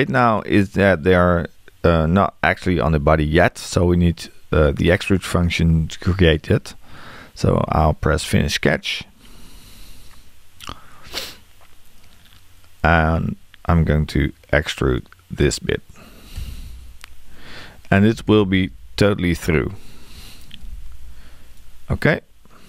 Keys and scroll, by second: 16.4 e.